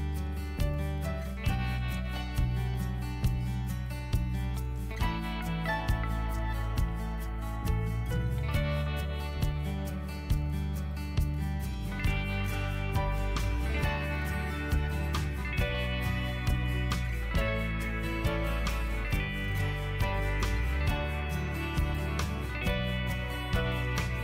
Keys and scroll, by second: 1.8 BackSpace, 5.8-8.1 typing, 9.5 ctrl+t, 14.4 Left, 15.0 Right, 15.7 Return.